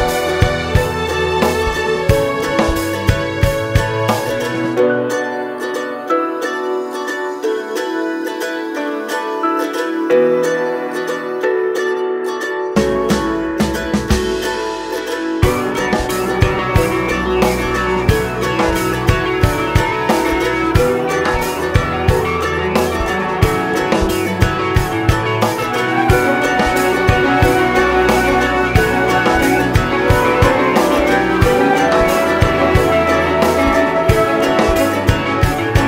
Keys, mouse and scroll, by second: 0.0 ctrl+KP_Add, 0.6 2, 1.9 Tab, 2.1 scroll down 1, 2.5-2.9 scroll up 2, 2.7 Tab, 3.1 alt+a, 3.2 scroll down 1, 3.7 Tab, 3.9 scroll down 1, 4.7 scroll up 1, 4.9 `, 5.7-6.0 scroll up 1, 6.8 KP_1, 7.0 KP_7, 7.1 scroll down 1, 8.3 s, 8.5-9.6 drag, 8.7-9.3 scroll up 1, 11.5 ctrl+j, 13.1 click, 16.3 ctrl+j, 16.9 click, 18.1 ctrl+j, 19.8 click, 30.3 shift+click, 30.8 ctrl+j, 33.1 click, 33.3 Tab, 34.2 click, 35.0 KP_Decimal, 35.2 scroll up 1, 35.5 Tab, 35.7 scroll down 2.